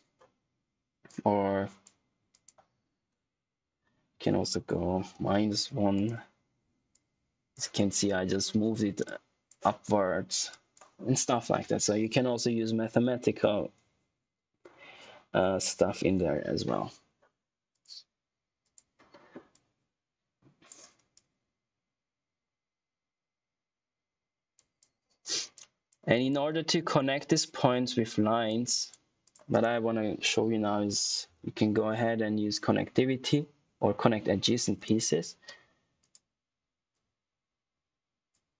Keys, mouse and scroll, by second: 4.0 Left, 5.0 -, 5.9 click, 17.6 click, 29.4 right click, 30.4-31.8 typing, 33.9 Down, 34.7 Return, 35.9 click.